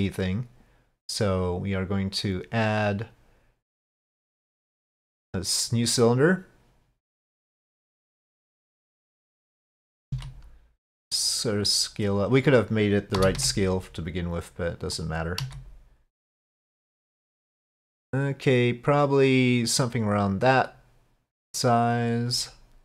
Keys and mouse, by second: 7.7 click, 8.6-9.7 drag, 10.1 s, 15.4 s, 20.7-22.1 drag.